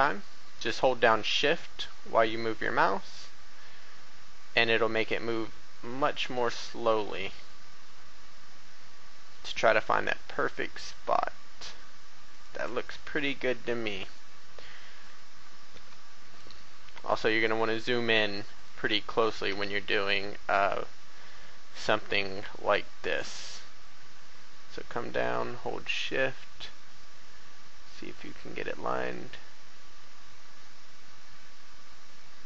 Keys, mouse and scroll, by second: 12.2 shift+click, 12.8 shift+a, 13.4-13.8 scroll up 1, 14.1 shift+middle click, 15.2 scroll down 1, 16.3-18.2 drag, 18.5 shift+right click, 19.4 shift+e.